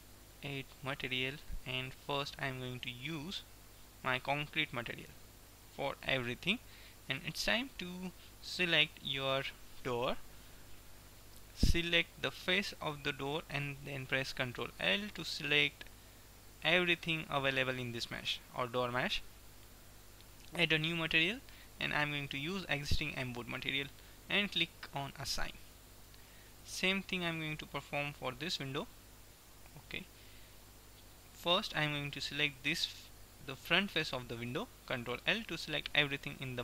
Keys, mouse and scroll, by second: 0.8-4.3 drag, 7.3-8.8 drag, 8.8 ctrl+l, 12.5-14.2 drag, 14.5 ctrl+l, 16.7-18.5 drag, 20.7-23.7 drag, 25.2 click, 25.7-28.2 middle drag, 28.2-29.8 drag, 32.2-34.3 drag, 35.2 ctrl+l, 36.2-36.6 drag.